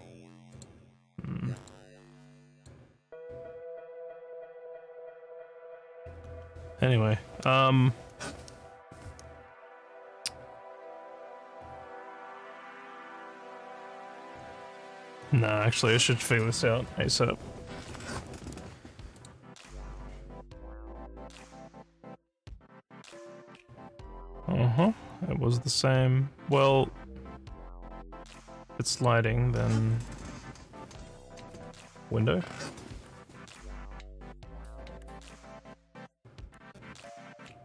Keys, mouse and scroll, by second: 0.5 click, 1.6 click, 2.5 click, 19.2 click, 21.5 scroll up 1, 24.1 scroll up 1, 28.9 click.